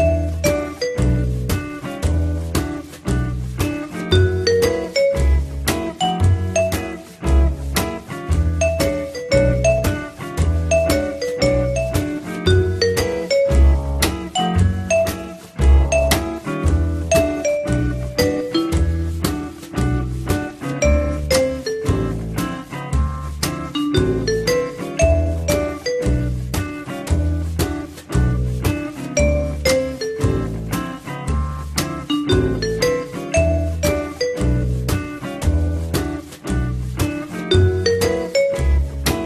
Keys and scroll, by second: 16.3 3, 19.5 w, 21.9 r, 34.4 t, 34.9 Return, 38.0 t, 38.8 Down.